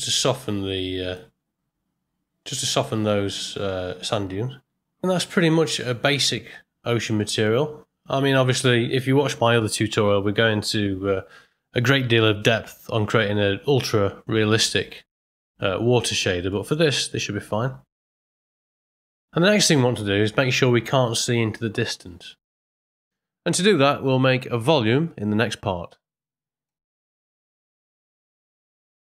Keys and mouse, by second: 7.2 middle click, 16.6 middle click, 24.5 ctrl+middle click, 24.8 ctrl+middle click, 25.8 middle click.